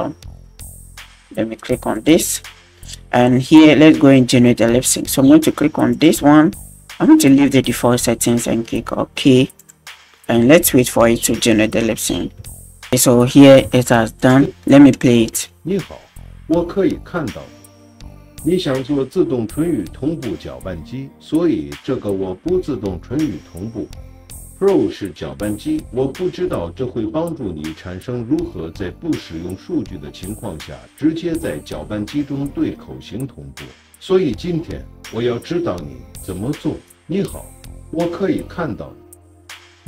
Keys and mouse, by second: 1.9 click, 5.9-12.9 drag, 14.2 drag, 15.4 space.